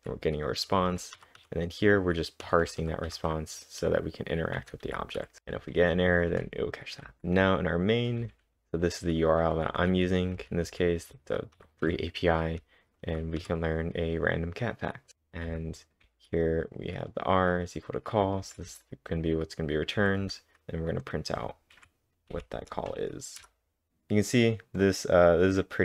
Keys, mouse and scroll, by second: 0.0-2.9 typing, 4.8-5.4 typing, 6.8-13.9 typing, 20.0 j, 22.3 Up, 22.3 typing, 23.4 Return, 23.9-24.8 scroll up 1.